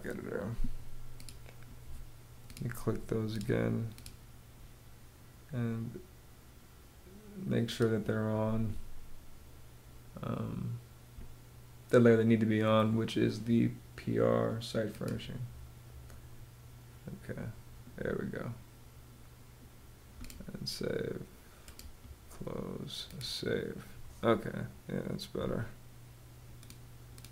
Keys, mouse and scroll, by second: 17.1 ⟲.